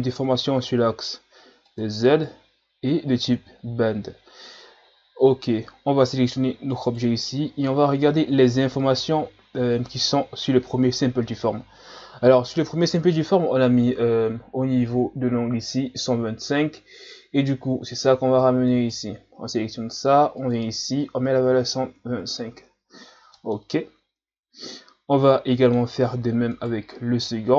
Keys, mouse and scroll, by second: 1.7 click, 3.2 click, 6.7 right click, 9.7 click, 18.6 right click, 20.3-23.4 drag, 23.5-26.5 middle drag, 26.5 right click.